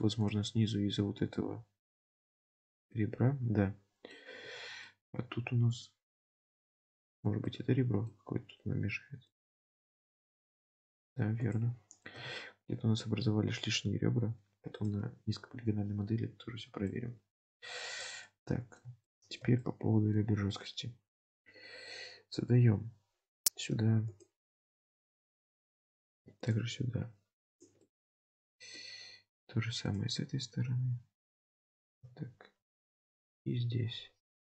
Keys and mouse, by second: 0.0 2, 0.2 click, 1.1 x, 2.4 alt+z, 2.9-4.2 middle drag, 4.7 alt+z, 4.9-6.1 middle drag, 7.5 middle click, 8.7 x, 9.8 alt+z, 10.8 middle click, 11.0 1, 12.2 KP_7, 13.2 g, 15.8 alt+z, 16.6 alt+z, 17.0 middle click, 17.7 2, 18.3-19.3 drag, 19.3 shift+middle click, 19.7 middle click, 28.0 middle click, 31.5 middle click, 32.0 KP_3, 32.9 ctrl+r.